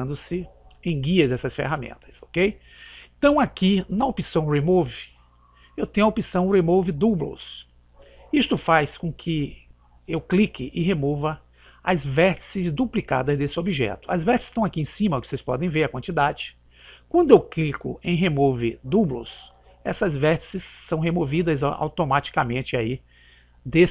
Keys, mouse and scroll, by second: 3.0 click, 19.5 click.